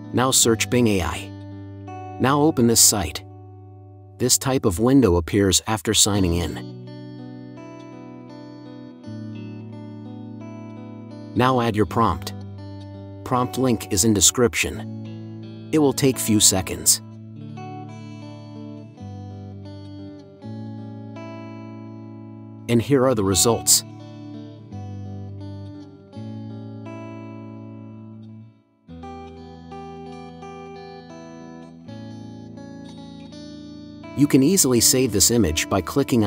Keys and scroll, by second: 0.1 g, 1.9 Return.